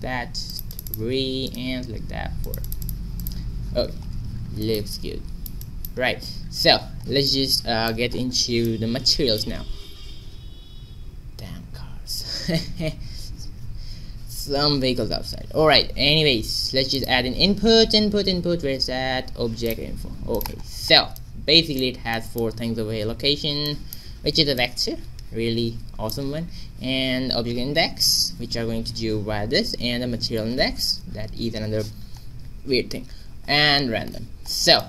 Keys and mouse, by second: 1.3 click, 3.2-4.9 drag, 6.1 a, 8.1-10.4 middle drag, 9.7 shift+a, 20.5 click, 24.5-25.6 drag, 33.2-34.8 middle drag.